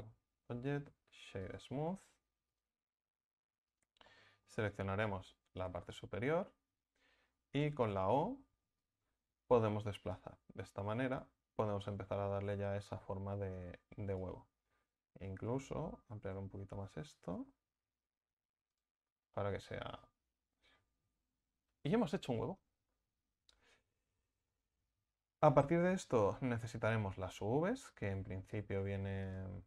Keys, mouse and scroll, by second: 1.9-2.4 scroll down 4, 2.4 right click, 2.8 Tab, 3.6 right click, 4.0-5.1 middle drag, 5.1 KP_1, 7.9 o, 8.7-11.7 drag, 15.2 s, 19.0 scroll down 1, 19.2 middle click, 19.6 Tab, 19.9-23.0 middle drag, 24.4-25.5 middle drag, 25.5 scroll up 1, 25.7 Tab, 26.3 a, 26.5 a, 29.2 click.